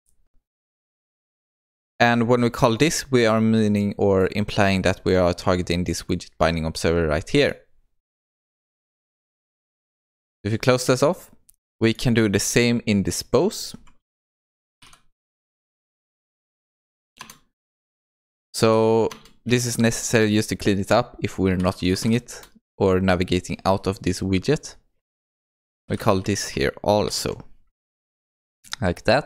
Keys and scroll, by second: 17.2 Return.